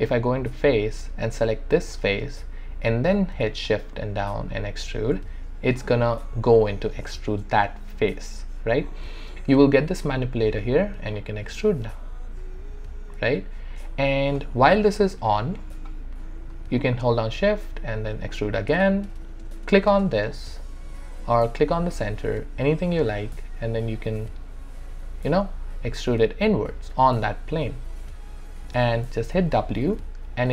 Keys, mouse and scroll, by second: 2.0 click, 3.6-10.9 shift+right drag, 5.2-7.0 right drag, 10.9-13.2 drag, 13.3 alt+middle click, 14.1 alt+click, 15.0 alt+right click, 17.3-20.3 shift+right drag, 20.3 click, 23.2-29.4 drag, 29.4 w.